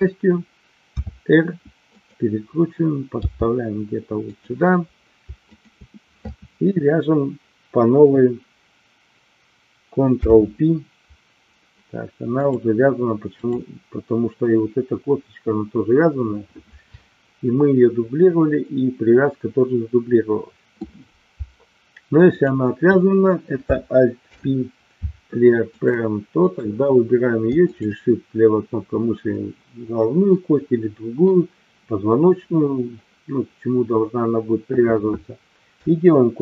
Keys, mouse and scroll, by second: 0.9 r, 1.9 click, 3.2 g, 4.2 click, 10.1 ctrl+p, 22.3 click, 24.2 alt+p, 26.3 click, 27.7 shift+click.